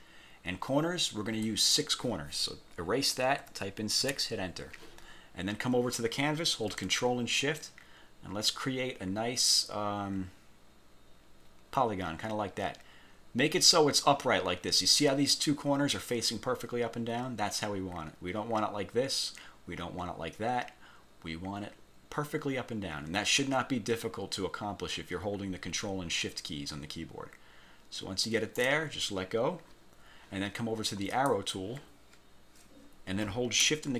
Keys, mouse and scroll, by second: 1.5 click, 3.5 6, 5.5 scroll down 2, 7.8-28.9 ctrl+shift+drag, 31.2 click.